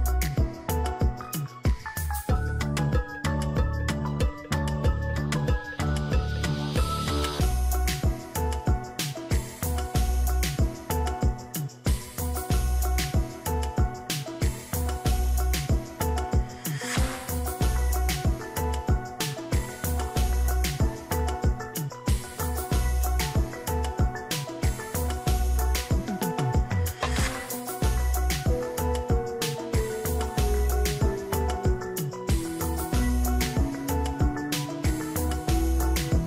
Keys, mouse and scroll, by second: 11.0 1, 11.3 5, 14.4 ctrl+j.